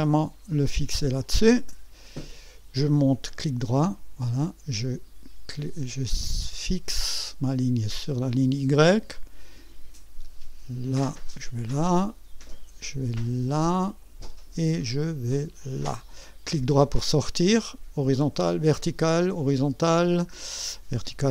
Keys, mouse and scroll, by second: 1.2 click, 3.0-4.0 right drag, 6.8 click, 11.2 click, 13.7 click, 15.6 click, 16.7 right click, 19.9-20.3 scroll down 1.